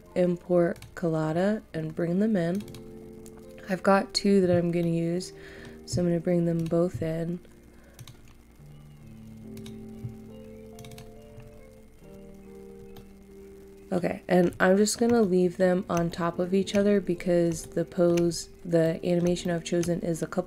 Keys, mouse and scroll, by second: 4.8 middle click, 6.6-10.6 drag, 11.3 scroll up 1, 12.9 middle click, 17.1 scroll down 1, 17.6 shift+middle click, 18.2 scroll up 1, 18.8 middle click, 19.4 shift+middle click, 19.9-20.4 shift+scroll.